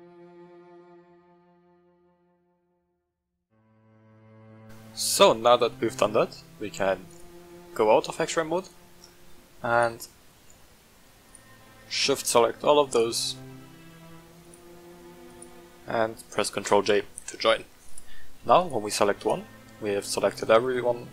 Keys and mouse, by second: 0.0-4.4 typing, 0.0 shift+middle click, 0.1 click, 0.2 click, 0.3 shift+middle click, 0.8 click, 1.4 shift+middle click, 1.7 click, 2.8 shift+middle click, 3.1 click, 3.3 click, 4.1 click, 4.2 shift+middle click, 4.3 shift+middle click, 4.5 drag, 4.6 middle drag, 5.6 middle drag, 7.9-8.3 middle drag, 8.7 shift+middle drag, 9.7 shift+click, 10.4 shift+middle click, 11.2 shift+click, 11.7-12.1 shift+middle drag, 12.9 shift+click, 13.2-13.6 shift+middle drag, 14.4 shift+click, 15.2 shift+click, 16.6 ctrl+j, 17.8 click, 18.5 click, 19.1 right click, 20.0-20.8 middle drag.